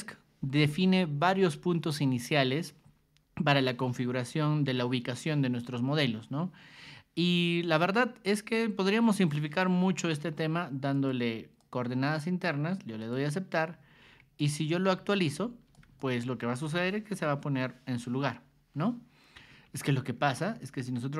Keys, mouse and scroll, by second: 9.8 Escape, 10.9 click, 11.6 click, 13.0 click, 14.0 ctrl+1, 14.4 click, 14.8 r, 15.2 ctrl+click, 16.0 ctrl+shift+click, 18.5 Escape, 20.1 alt+Tab, 20.4 alt+Tab, 20.7 alt+Tab.